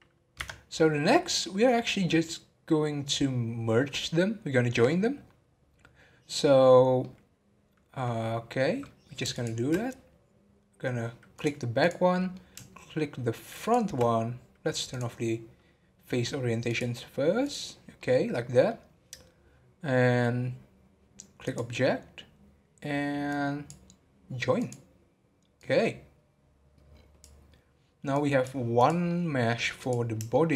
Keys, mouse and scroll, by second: 0.4 Tab, 1.0-11.3 middle drag, 11.3-12.2 drag, 12.2-13.9 middle drag, 14.9-18.0 drag, 18.0-30.5 middle drag.